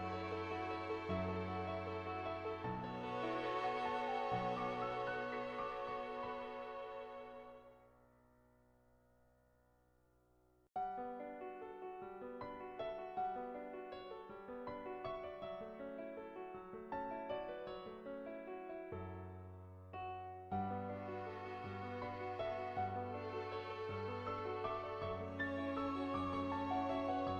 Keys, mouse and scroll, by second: 0.0 ctrl+z, 0.3 click, 0.5 click, 0.9 click, 1.2 ctrl+z, 1.4 ctrl+z, 1.9 ctrl+z, 2.4 ctrl+z, 5.7-8.3 drag, 8.7 ctrl+z, 10.5 click, 17.6 ], 17.7 ], 18.2 [, 18.5 [, 18.6 click, 19.5 ctrl+z, 19.7 [, 20.0 click, 21.2 click, 21.3 [, 21.5 click, 23.7 click, 24.0 [, 24.3 click, 24.8 ctrl+z, 24.8 [, 25.0-26.7 drag, 26.7 [, 27.0 click.